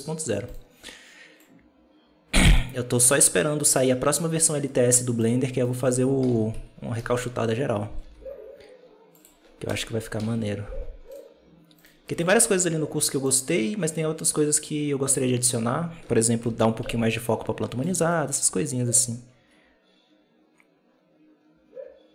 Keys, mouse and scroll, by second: 0.4-1.3 right drag, 1.3-2.9 drag, 2.9 right click, 3.6-5.6 drag, 5.6 right click, 6.1 KP_7, 6.4 KP_Decimal, 6.9-7.5 scroll down 1, 7.9 g, 9.5 KP_0, 10.1 alt+a, 11.7 right click, 12.3-12.8 scroll down 1, 13.1-15.5 drag, 15.5-16.3 scroll up 1, 16.3 Home, 17.0-21.1 ctrl+middle drag.